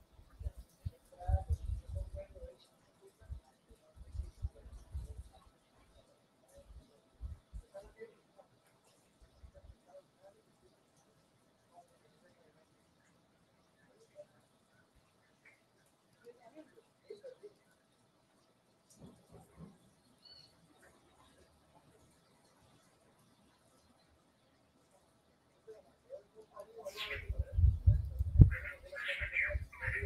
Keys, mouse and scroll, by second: 16.1 click, 17.5 click, 26.4 click, 28.0 click.